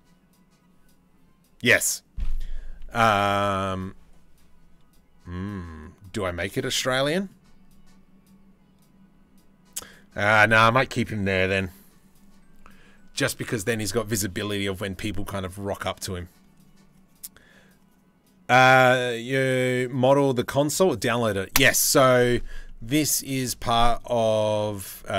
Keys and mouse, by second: 3.0-3.4 shift+middle drag, 5.5 middle click, 22.4-22.9 drag, 23.0-24.2 shift+middle drag, 24.2 click, 24.4-25.1 middle drag.